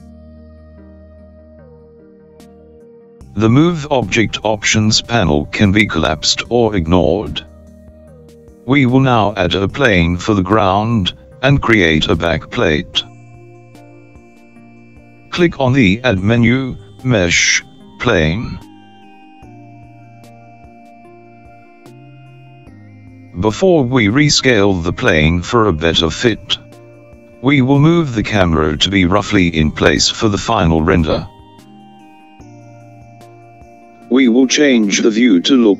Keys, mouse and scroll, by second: 9.6 click, 16.0-19.8 drag.